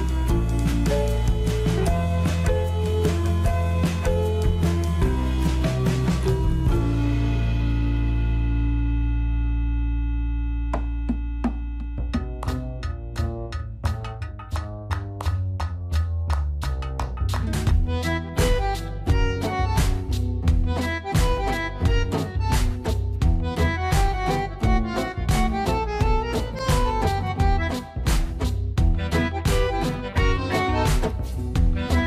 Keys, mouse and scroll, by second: 1.4 z, 17.6 click, 20.5-21.2 typing, 27.6 click, 28.4-32.0 middle drag.